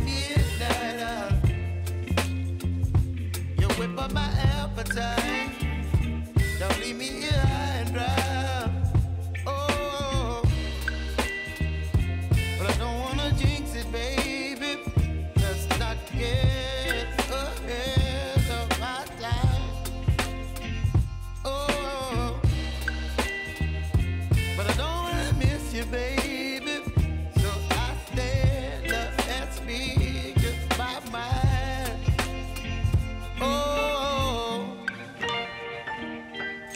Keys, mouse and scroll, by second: 3.0 space, 5.4 click, 5.9 space, 6.8-8.5 drag, 8.5 -, 8.6 space, 11.7 space, 14.6 n, 15.1 space, 20.1 space, 21.3 click, 21.6 u, 22.3 click, 24.6-25.8 typing, 26.4 click, 36.0-36.7 drag.